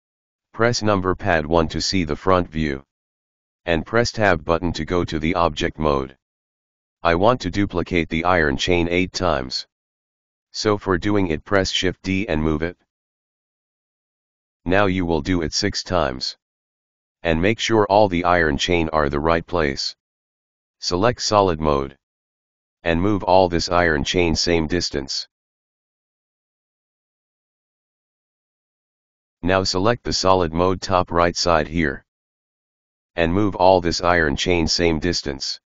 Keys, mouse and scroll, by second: 0.0 KP_1, 2.4 Tab, 3.8-5.3 scroll down 7, 5.7-7.8 middle drag, 7.8 KP_Decimal, 8.0 scroll up 1, 8.7-11.1 middle drag, 11.1 shift+d, 14.6 shift+d, 15.8 shift+d, 16.8 x, 17.4 ctrl+z, 18.0 shift+d, 19.7 shift+d, 20.8-21.5 scroll up 2, 21.5 right click, 21.8 shift+d, 23.9 right click, 24.1 shift+d, 26.2-26.6 scroll up 1, 26.6 middle click, 27.2 scroll down 1, 27.4-29.0 middle drag, 30.4 click, 31.4 right click, 31.6-32.4 scroll up 2, 32.4-33.1 scroll down 1, 33.1 scroll up 1, 33.4 scroll down 1, 33.7 right click, 34.4 g.